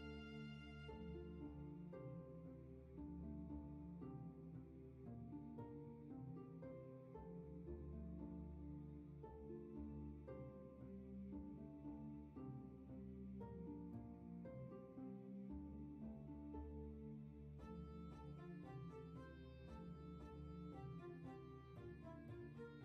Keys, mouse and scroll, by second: 0.4 scroll up 1, 10.7 scroll down 1, 12.0 ctrl+z, 14.4 ctrl+shift+z, 14.8-16.6 scroll up 1, 19.6 ctrl+z, 22.4 ctrl+shift+z.